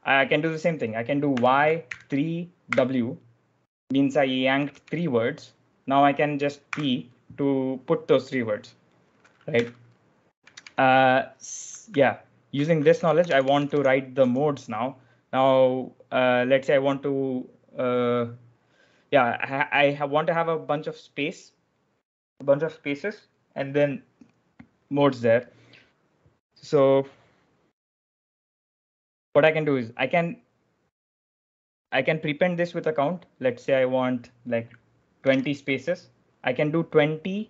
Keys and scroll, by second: 1.0-2.6 typing, 4.2-5.0 typing, 6.3-7.1 typing, 9.5 u, 10.3 k, 12.5-14.1 typing, 34.8-35.7 typing.